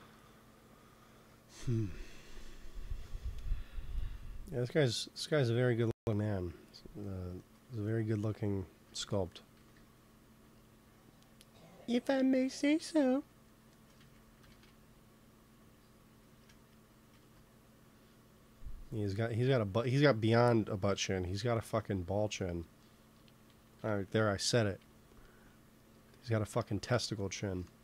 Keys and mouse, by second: 2.8 ctrl+s, 5.1-6.9 drag, 6.9-8.0 middle drag, 9.4 g, 9.6 f, 10.2 f, 10.9-12.2 drag, 13.1-14.2 drag, 14.0 ctrl+z, 14.5 ctrl+shift+z, 16.3 ctrl+z, 17.0 ctrl+s, 21.1-23.7 middle drag, 23.7 KP_3, 26.2-27.8 middle drag.